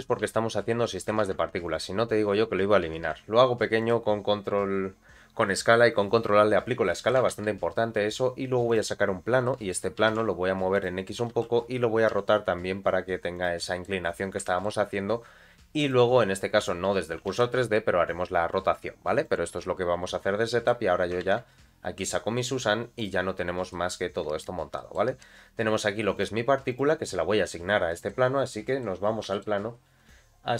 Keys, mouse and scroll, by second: 0.2 s, 2.1-2.8 scroll up 2, 2.8 g, 4.2-5.0 scroll down 1, 6.9 middle click, 7.3 shift+a, 9.1 scroll down 2, 9.4 middle click, 10.0 g, 11.2 r, 13.6 middle click, 14.0 scroll up 2, 14.4 shift+middle click, 15.8 click, 16.9-17.2 scroll down 2, 17.2 r, 20.0 scroll up 2, 20.4 middle click, 21.2 shift+a, 23.7 middle click, 24.1 scroll down 1, 24.8 middle click, 26.1 click, 26.7 click, 27.6 scroll down 1, 27.9 middle click, 28.6 middle click, 29.0 scroll up 2, 29.3 shift+middle click.